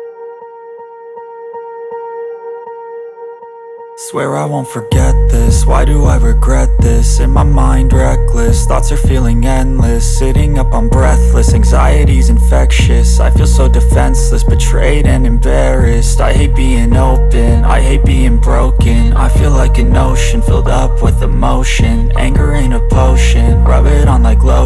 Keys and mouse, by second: 8.5 shift+d, 10.8 KP_1, 11.5 r, 15.6-23.3 middle drag, 17.2 z, 18.1 z, 18.9 shift+d, 19.5 s, 21.0 s, 23.3-24.6 drag, 24.1 s.